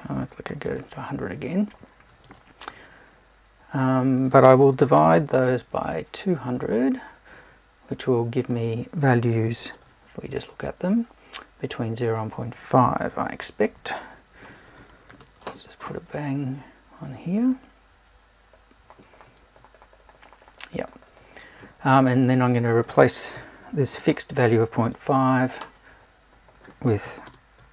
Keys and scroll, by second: 23.3 BackSpace.